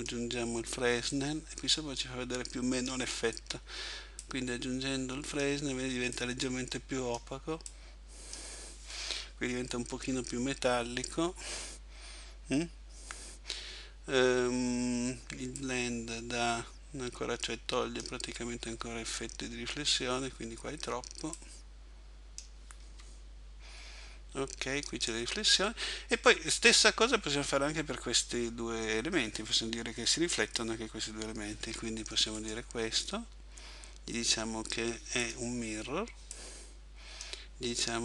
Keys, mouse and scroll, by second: 31.7 Escape, 32.4 right click, 35.3 click.